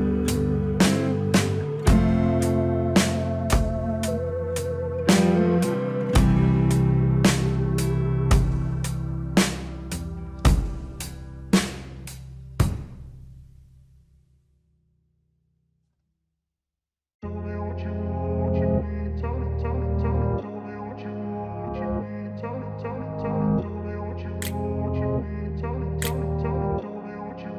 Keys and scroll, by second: 3.8 alt+w, 12.5 alt+w.